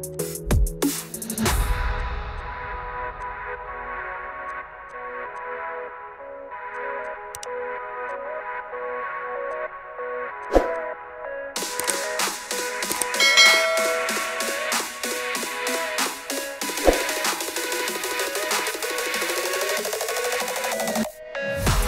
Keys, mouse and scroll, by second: 0.5 click, 1.2 click, 1.4 click, 2.1 click, 4.4 click, 4.8 click, 6.5 click, 6.7 click, 7.6 click, 8.5 click, 8.9 middle click, 9.0 middle click, 9.1-10.1 scroll, 9.6 click, 10.0 middle click, 10.1 middle click, 10.4 click, 12.1 click, 12.7 click, 13.8 click, 15.9 click, 16.2 click, 17.0 click, 17.4 click, 18.4 click, 18.7 click, 19.2 click, 19.5 scroll, 19.8 click, 20.3 click, 21.1 click, 21.8 click.